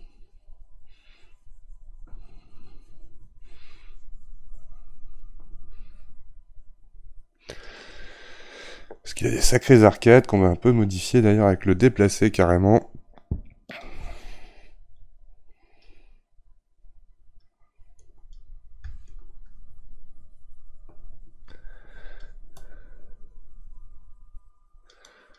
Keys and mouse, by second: 10.2-13.8 middle drag, 13.8-25.3 drag.